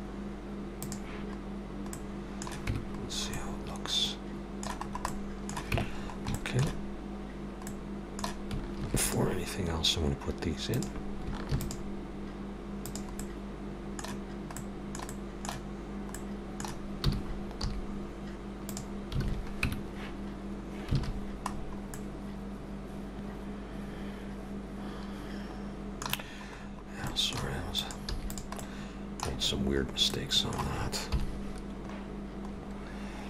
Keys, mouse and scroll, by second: 0.9 click, 1.9 middle click, 2.7 Tab, 3.0-3.6 scroll down 3, 3.4 middle click, 4.9 scroll up 2, 5.1 middle click, 5.8 Tab, 6.0 scroll up 3, 6.4 shift+middle click, 7.7 middle click, 8.8 ctrl+r, 11.5 ctrl+r, 13.2 middle click, 14.6 middle click, 17.0 g, 19.3 alt+a, 19.6 Tab, 21.0 alt+a, 21.1 scroll down 2, 21.9 middle click, 21.9 scroll down 6, 26.2 scroll down 4, 27.0 scroll down 3, 27.1 shift+middle click, 27.8 click, 28.1 x, 28.6 middle click, 29.4-29.9 scroll up 5, 30.1 middle click, 31.9 middle click, 31.9-32.5 scroll up 5, 31.9 KP_7.